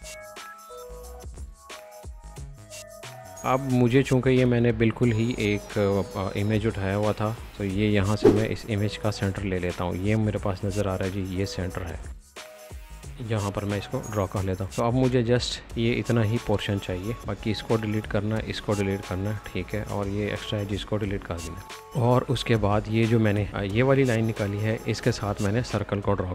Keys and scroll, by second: 0.7 Escape, 0.9-2.7 typing, 7.3 l, 16.3 Escape, 17.2 e, 21.3 c.